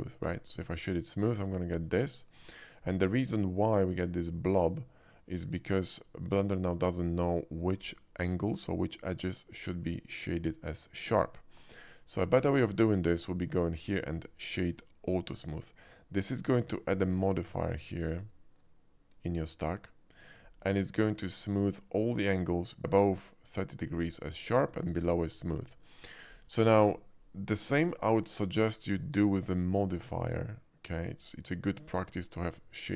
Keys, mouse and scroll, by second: 0.8 click, 1.7 middle click, 2.4 shift+middle drag, 3.3-5.2 shift+middle drag, 5.6 middle drag, 6.3-7.0 middle drag, 9.6 middle drag, 13.0 ctrl+z, 13.0 right click, 15.4 click, 20.8 middle click, 25.1 shift+middle click, 26.3 shift+middle drag, 27.0 shift+middle drag, 28.5 shift+click, 30.9 right click.